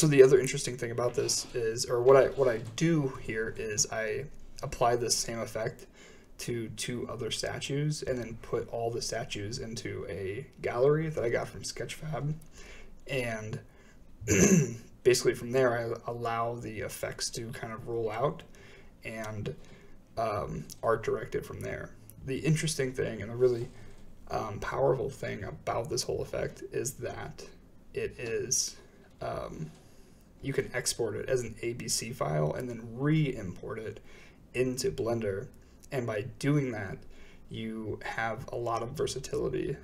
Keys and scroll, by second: 10.5 space, 12.0 shift+Left, 12.0 space, 13.3 space, 17.0 space.